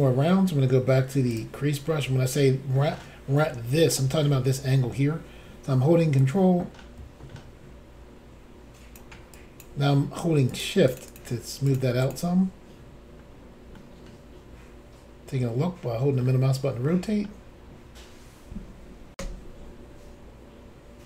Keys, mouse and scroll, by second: 1.3 click, 6.2 ctrl+click, 9.4 ctrl+click, 10.5 shift+click, 10.6 shift+click, 10.9 shift+click, 11.0 shift+double click, 11.2 shift+click, 11.7 shift+click, 11.8 shift+click, 12.0 shift+click, 12.1 shift+click, 13.1 scroll down 1, 13.8 middle click, 16.9 shift+middle click, 19.1 Insert.